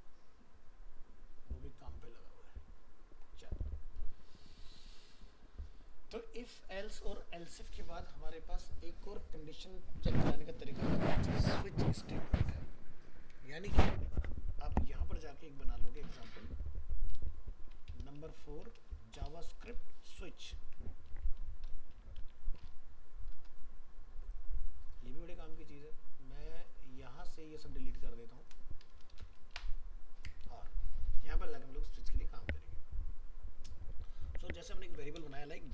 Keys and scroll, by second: 16.3 alt+f, 16.4 alt+移, 19.8 ctrl+shift+Left.